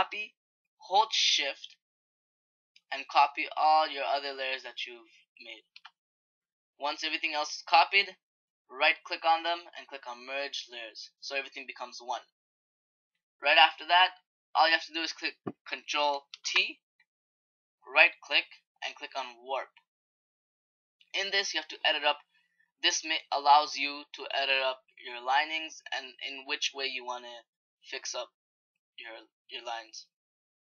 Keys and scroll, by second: 16.1 ctrl+t.